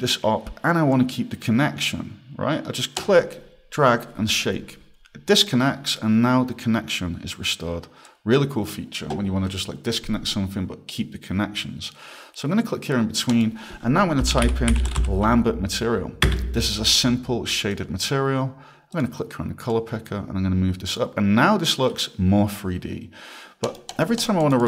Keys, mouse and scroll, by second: 3.0 click, 8.1 click, 13.3 click, 14.0-15.5 typing, 16.3 Return, 17.7 click, 18.9 click, 23.6 click, 23.9 click, 24.2 click, 24.6 click.